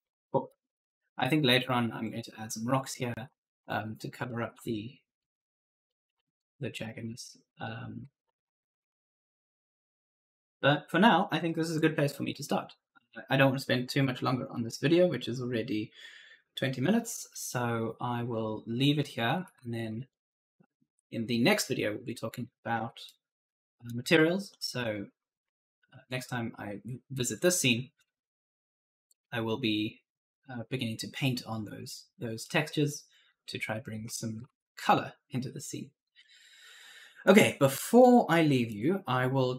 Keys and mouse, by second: 0.0-4.5 typing, 1.7 right click, 6.6-10.3 typing, 6.9 right click, 17.4 right click, 18.9-20.2 typing, 19.2 right click, 23.0 right click, 24.7 right click, 25.2 s, 25.6 w, 32.4 right click, 33.9 right click, 33.9 a, 34.2 d, 37.1 click.